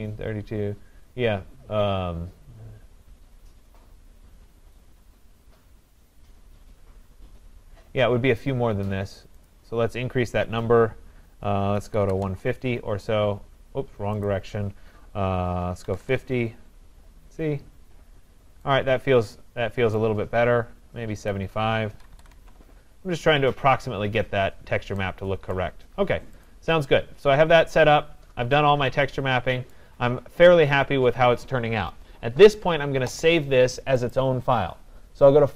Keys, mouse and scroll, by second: 9.5 click, 11.7-12.7 typing, 14.2 click, 15.8-16.1 typing, 16.2 Tab, 17.6 scroll, 18.3 scroll, 19.6-20.7 typing, 19.9 scroll down 3, 20.0 right click, 21.3 click, 21.8-22.7 typing, 23.2 scroll, 24.0-24.3 scroll, 25.6 right click, 25.9 scroll, 26.5 click, 26.9 scroll, 28.1 scroll, 29.5 scroll down 6, 29.7 right click, 30.0 scroll down 2, 30.6 scroll up 4, 31.0-31.4 scroll, 34.1 click.